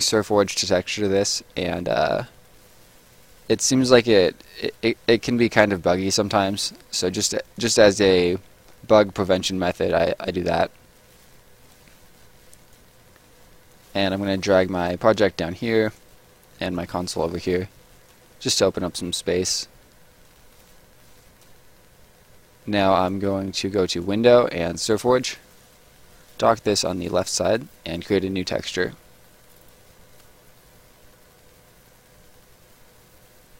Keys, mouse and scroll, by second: 2.5 click, 6.1 click, 10.9 click, 13.7 click, 20.2 click, 22.7 click.